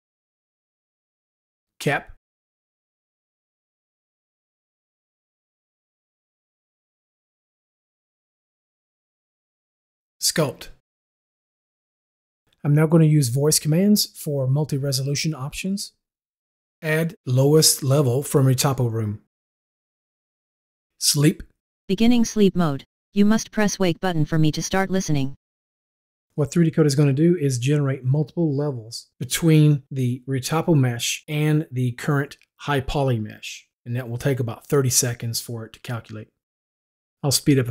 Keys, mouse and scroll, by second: 2.1 u, 4.3 click, 4.8 Escape, 10.8 u, 20.3 u.